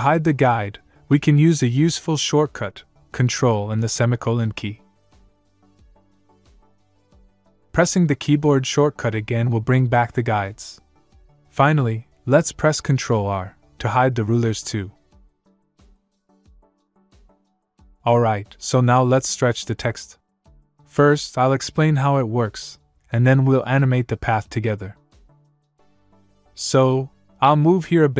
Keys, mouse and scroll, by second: 6.0 ctrl+;, 10.2 ctrl+;, 12.6 ctrl+Num_Lock, 12.8 ctrl+;, 16.7 ctrl+Num_Lock, 17.0 ctrl+r, 27.7 scroll down 1.